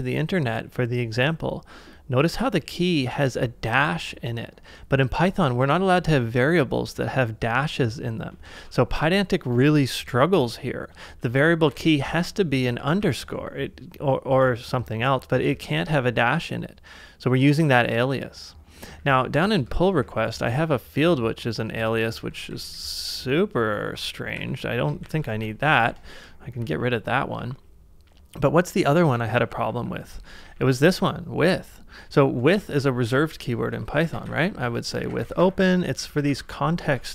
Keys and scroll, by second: 8.5 super+Tab, 10.1 shift+6, 11.3-12.2 typing, 12.8 ctrl+c, 13.0 ctrl+c, 13.2 ctrl+c, 15.5 e, 18.2-19.0 j, 20.0 shift+8, 21.4-28.0 typing, 25.4 ctrl+c, 29.2 shift+[, 29.3 shift+[, 29.5 shift+[, 29.7 shift+[, 32.0-37.1 typing, 32.6 ctrl+c, 37.0 ctrl+c.